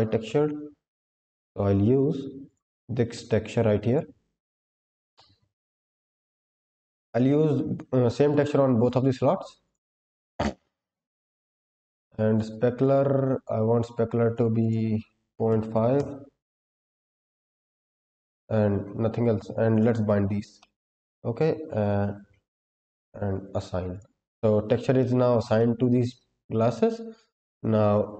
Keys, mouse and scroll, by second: 6.5 click, 11.1-11.8 scroll down 2, 11.9 click, 12.7-14.3 drag, 14.5-15.9 drag, 16.7-17.5 scroll down 5, 18.1-19.6 scroll up 6, 19.6 click, 20.5 middle click, 21.6-23.5 scroll up 11, 23.8 click, 24.9 shift+middle click, 25.5 middle click.